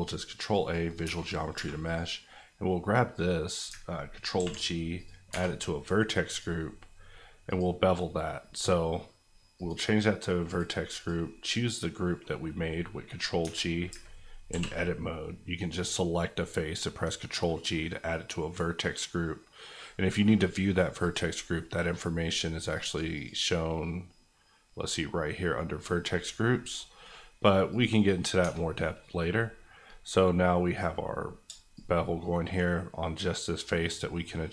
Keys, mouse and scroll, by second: 0.5 click, 1.0 Tab, 1.5 3, 1.8 click, 2.2 middle click, 4.3 ctrl+g, 4.9 click, 5.3 Tab, 6.2 click, 11.4 middle click, 13.4 Tab, 13.9 ctrl+Tab, 14.5 ctrl+g, 21.0 click, 26.5 middle click, 27.7 click, 28.4 Tab, 28.8 middle click, 31.8-34.5 shift+drag.